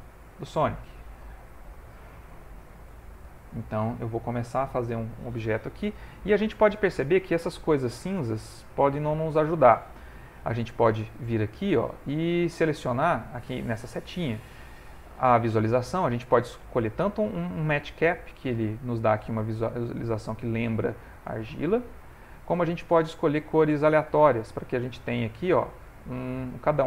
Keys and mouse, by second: 1.4 ctrl+middle click, 2.2 shift+middle click, 2.3 ctrl+middle click, 2.9 shift+middle click, 3.3 ctrl+middle click, 3.9 click, 5.7 ctrl+middle click, 12.0 click, 19.3 middle click, 22.1 click, 24.5 middle click.